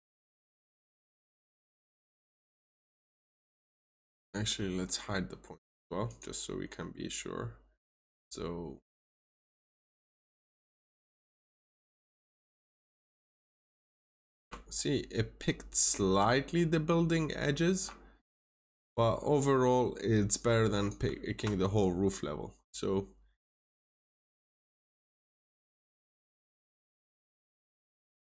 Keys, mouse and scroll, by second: 1.9 ctrl+shift+click, 3.8-4.6 scroll up 1, 5.9 click, 13.8 scroll up 1, 14.6 ctrl+shift+click, 18.2 scroll up 1, 18.8 middle click, 19.2 scroll down 1, 20.3 click, 21.0 scroll down 1, 21.7 ctrl+shift+click.